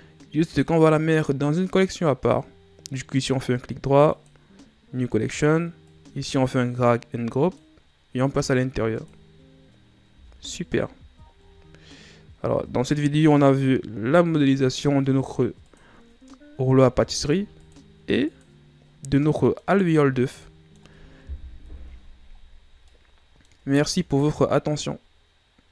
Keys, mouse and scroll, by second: 0.4 click, 1.6-4.6 right drag, 5.8 click, 8.9 click, 10.1 a, 11.0 ctrl+scroll down 3, 15.1 click, 15.6 click, 17.5 click, 18.1 click, 19.1-20.0 middle drag, 20.0-20.4 scroll up 2, 20.4-21.6 middle drag, 21.6 KP_1, 22.8-23.7 middle drag, 23.7-24.1 ctrl+scroll up 4, 24.1-25.7 middle drag.